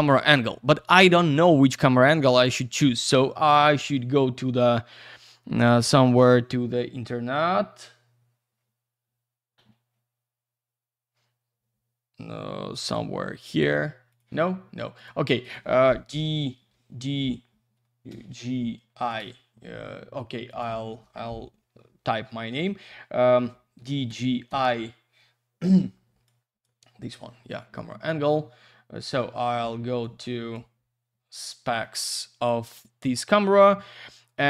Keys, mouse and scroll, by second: 2.3 click, 14.4 click, 15.0 click.